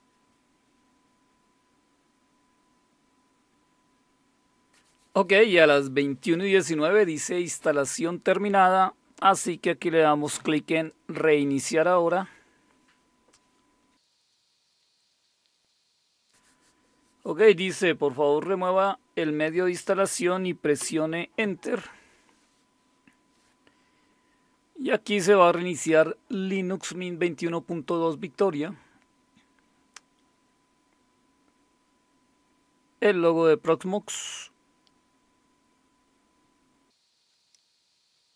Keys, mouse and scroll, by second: 10.7 click, 20.8 Return, 37.2 Down, 37.3 Up, 38.2 click.